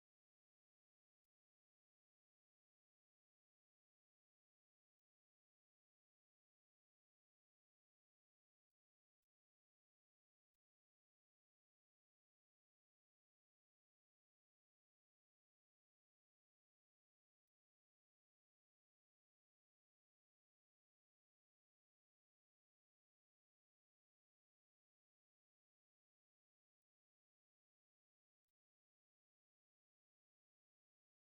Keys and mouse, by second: 2.0 click, 4.2 click, 4.7 middle click, 5.2 middle click, 6.6 click, 7.0 click, 7.7 middle click, 8.6 middle click, 9.1 click, 9.4 middle click, 10.3 click, 14.4 click, 17.6 middle click, 19.0 shift+middle click, 19.7 shift+a, 22.8 middle click, 23.8 Tab, 24.9 Tab, 25.9 click, 26.8 middle click, 27.1 Tab, 27.7 middle click, 28.0 middle click, 28.8 middle click, 29.2 click, 30.8 middle click.